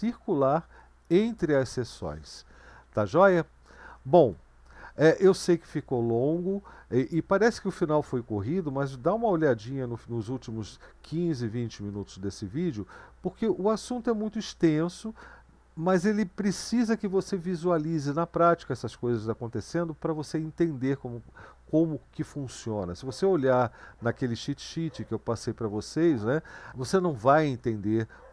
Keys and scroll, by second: 4.3 Right.